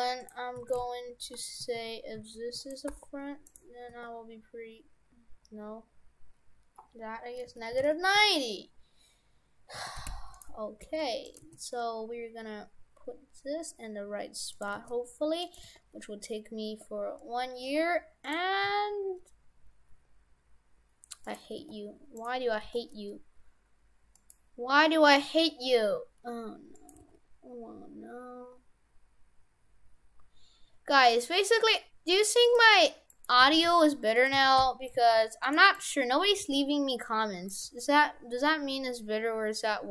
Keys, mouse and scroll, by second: 0.7 shift+f, 2.9 r, 3.9 r, 9.5 scroll up 1, 9.8 shift+f, 10.9 g, 11.4 g, 14.7 g, 15.6 g, 18.6 g, 19.5 s, 21.5 g, 22.6 g, 25.3 s, 27.0 g, 33.1 right click, 33.5 shift+f, 34.4 shift+f, 35.7 right click, 36.3 g, 37.7 g.